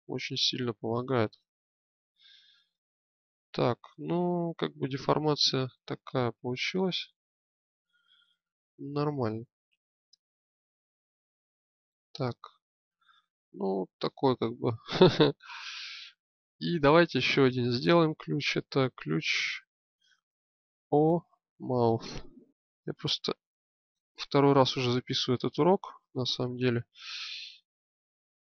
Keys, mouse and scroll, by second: 3.0 middle click, 6.1-7.9 alt+middle drag, 9.7 Tab, 12.4-13.5 drag, 14.3-17.3 drag, 18.1-28.5 drag.